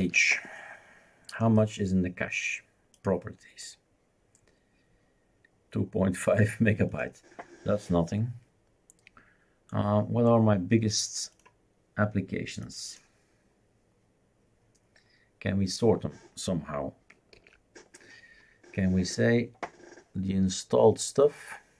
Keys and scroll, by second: 0.0 ctrl+h, 17.3 super+f.